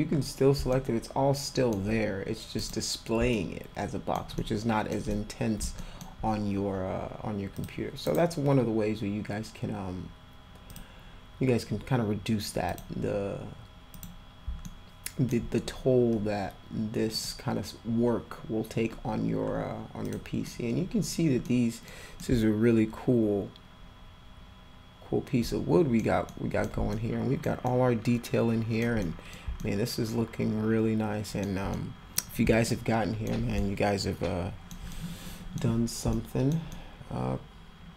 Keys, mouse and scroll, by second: 0.7-1.7 alt+middle drag, 2.6 click, 3.3-4.1 alt+middle drag, 4.4-4.9 alt+middle drag, 5.1 middle click, 5.8 alt+middle click, 7.6 click, 10.7 click, 12.7 click, 13.9 click, 14.6 alt+middle click, 17.1 click, 20.0 click, 20.5 middle click, 21.4 middle click, 22.2-26.0 alt+middle drag, 26.3 middle click, 26.9 alt+middle click, 27.7-28.8 alt+middle drag, 29.0 middle click, 29.6-31.4 alt+middle drag, 31.7 middle click, 32.6 alt+middle click, 33.6-34.7 alt+middle drag, 34.9-35.5 middle drag, 36.1 alt+middle click, 36.7-37.9 alt+middle drag.